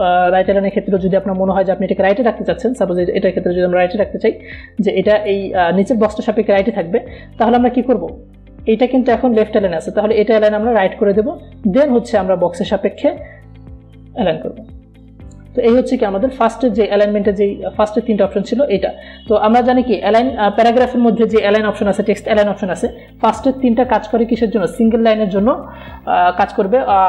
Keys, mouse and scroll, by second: 3.0 click, 4.0-14.4 alt+drag, 19.2 click.